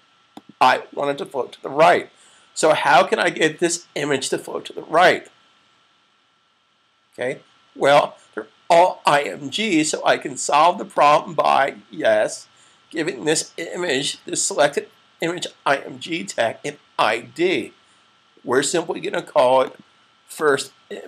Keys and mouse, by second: 10.9 click, 13.7 click, 19.4 click.